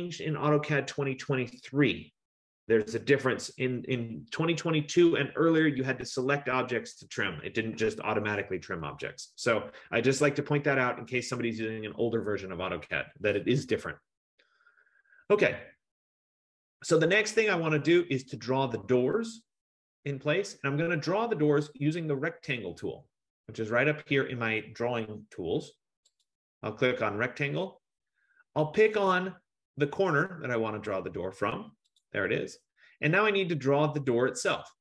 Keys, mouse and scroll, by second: 13.9 Return, 15.6-17.1 scroll, 17.1-18.9 scroll, 26.2 click, 32.0-34.8 drag.